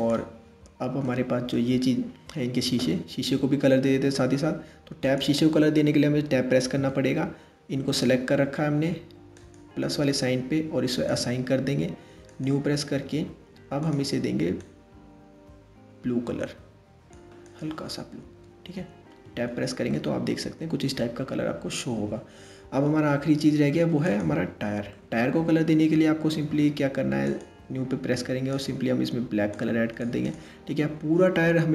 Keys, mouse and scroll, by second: 0.2-0.6 scroll up 1, 0.6-4.8 middle drag, 4.8 click, 6.4 Tab, 9.0-12.5 drag, 12.5-12.8 scroll down 2, 13.4 click, 18.9 Tab, 19.5-22.5 middle drag, 22.8 scroll up 1, 23.7 click, 24.5-26.9 middle drag, 26.9-28.3 drag.